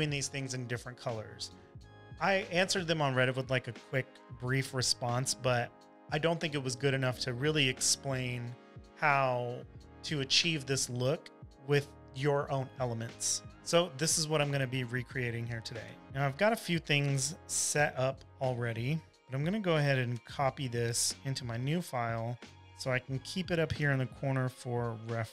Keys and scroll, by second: 16.1 m, 18.3 super+d, 18.9 shift+m, 22.6 super+c, 23.2 super+`, 24.0 super+v, 24.6-25.3 typing.